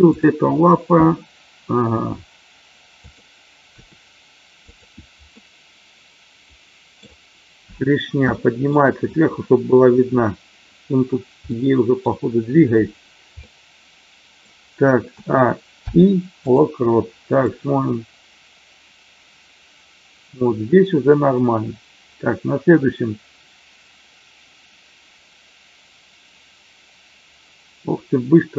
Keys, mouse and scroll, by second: 1.9 g, 3.0 click, 3.8 r, 4.7 click, 5.3-7.0 middle drag, 8.3-8.7 shift+middle drag, 11.5-12.0 middle drag, 13.3-14.4 middle drag, 15.2 a, 15.8 i, 17.5-28.5 drag.